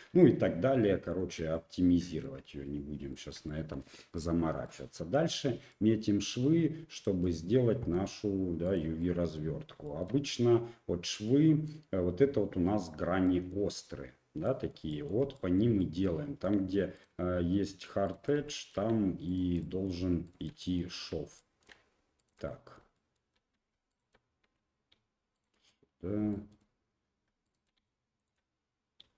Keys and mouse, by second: 0.1 Tab, 1.1 shift+middle click, 1.5 middle click, 3.1 shift+middle click, 3.4 middle click, 4.6 middle click, 5.7 middle click, 6.9 ctrl+right click, 7.9 2, 8.6 right click, 9.0 middle click, 9.8 shift+middle click, 11.2 middle click, 13.2 middle click, 14.4 middle click, 14.9 shift+middle click, 15.3 middle click, 15.8 shift+middle click, 16.9 ctrl+middle click, 18.0 ctrl+middle click, 18.4 shift+middle click, 19.2 ctrl+middle click, 19.6 middle click, 20.2 shift+middle click, 20.6 middle click, 21.3 shift+middle click, 22.2 ctrl+right click, 22.4 middle click, 22.9 shift+middle click, 23.9 shift+click, 25.3 ctrl+right click, 25.6 middle click, 26.3 shift+middle click, 27.4 shift+right click.